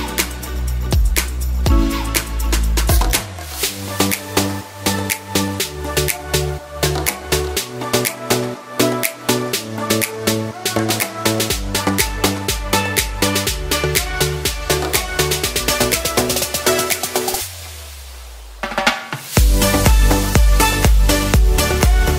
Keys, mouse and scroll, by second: 0.4 scroll down 2, 0.6 middle click, 1.4 shift+a, 7.0 click, 8.1 middle click, 9.1 shift+middle click, 9.7 middle click, 10.5 r, 13.8 middle click, 15.0 click, 16.3 middle click, 17.8 click, 21.4 middle click.